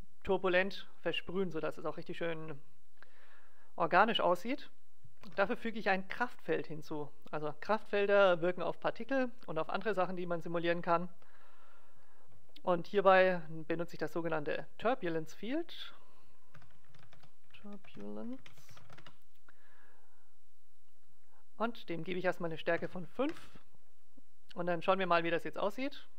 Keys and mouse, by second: 2.8-6.3 drag, 5.2 shift+a, 15.4-17.2 drag, 20.7-23.8 drag, 24.4-25.8 drag, 25.0 alt+a, 25.9 click.